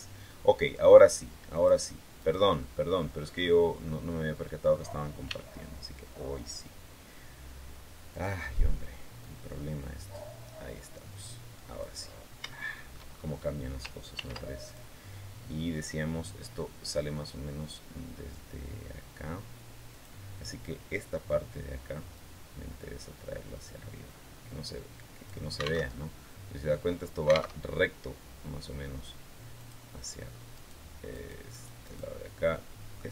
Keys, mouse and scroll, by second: 1.4 click, 2.0 right click, 2.4 middle click, 3.2 scroll up 1, 3.6-4.7 middle drag, 5.0 e, 7.9 click, 9.0-11.8 drag, 11.9 scroll up 1, 12.3 shift+middle click, 12.9-13.2 shift+scroll up 1, 13.9 ctrl+r, 14.4 ctrl+click, 19.7 click, 21.9-25.2 drag, 25.6 alt+Tab, 27.4 alt+Tab, 29.4 click, 30.4 right click, 30.9 right click, 32.3 middle click.